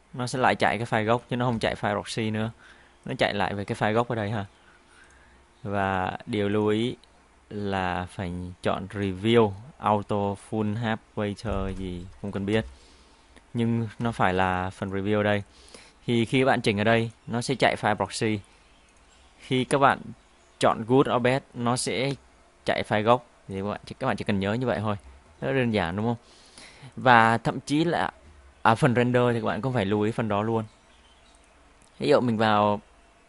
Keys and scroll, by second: 12.5 space, 14.1 space.